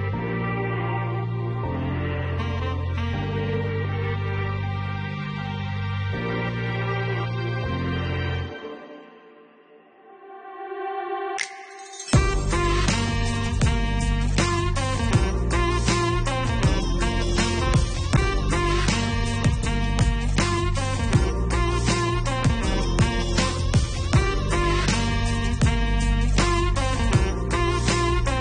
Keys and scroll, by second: 0.5 6, 1.1 0, 1.7 4, 6.6 9, 7.0 7, 7.6 0.